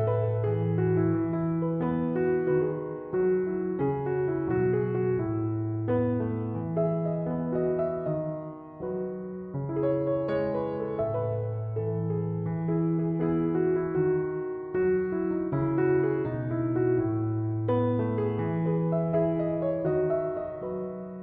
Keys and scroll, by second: 0.2 Return, 13.7 1, 13.9 2, 14.1 0, 14.3 Return, 16.2 -, 16.6 Return, 19.3 3, 19.5 0, 19.9 Return.